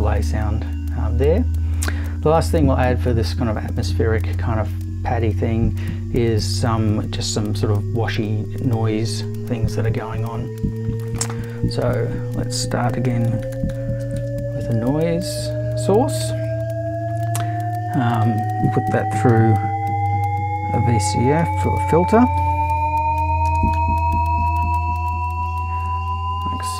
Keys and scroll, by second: 11.9 super+i, 13.2-14.7 typing, 18.2 super+i, 19.3 super+v, 21.1-23.7 typing.